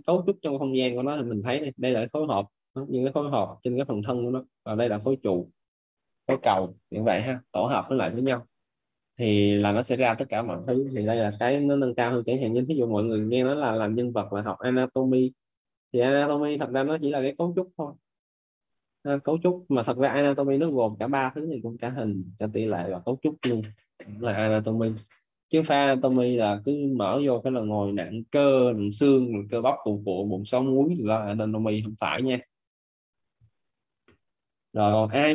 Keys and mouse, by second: 33.8 Escape, 34.8 right click.